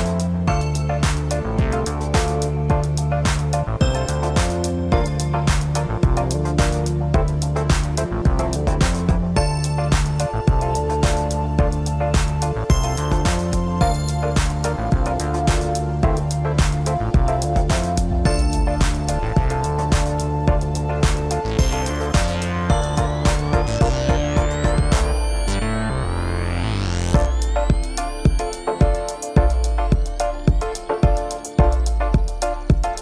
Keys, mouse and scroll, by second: 2.2-2.6 scroll up 1, 2.6 g, 4.8-5.6 middle drag, 5.6 scroll down 2, 7.0-9.8 drag, 9.8-10.4 scroll down 1, 10.4-11.1 scroll up 1, 11.1 g, 13.7-16.8 middle drag, 18.1-19.2 scroll down 1, 19.2 shift+d, 24.7 shift+r, 25.6 scroll up 1, 25.9 scroll down 2, 26.1-28.1 middle drag, 28.1-28.5 scroll down 3, 28.5-29.0 scroll up 3, 29.0-32.0 middle drag, 32.4 click.